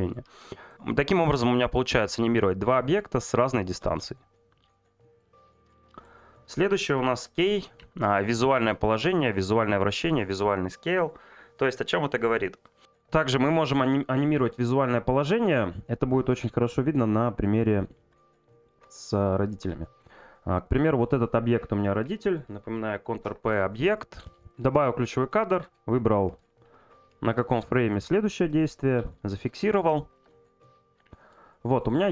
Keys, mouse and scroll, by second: 18.6 click, 23.9 shift+middle click, 27.3 click, 27.6 shift+middle click, 30.1 click, 31.5 shift+middle click.